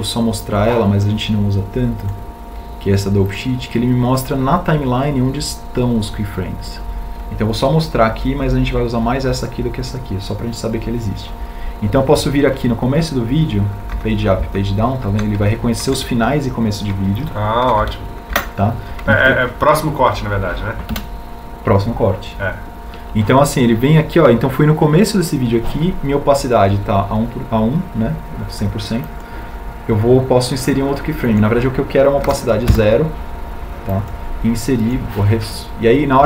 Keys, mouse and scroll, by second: 22.7 Home.